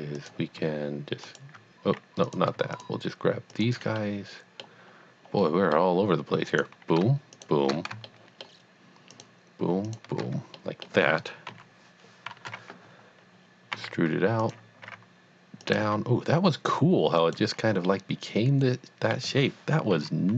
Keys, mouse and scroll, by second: 1.2 alt+click, 2.8 shift+click, 3.5 shift+double click, 4.1 middle click, 5.4 middle click, 6.5 click, 7.3 shift+click, 8.1 shift+middle click, 9.1 shift+click, 9.9 shift+double click, 10.5 middle click, 11.5 KP_3, 12.3 KP_1, 13.7 e, 14.4 click, 14.9 r, 15.7 click, 15.9 g, 17.1 click, 18.2 middle click, 19.9 KP_3.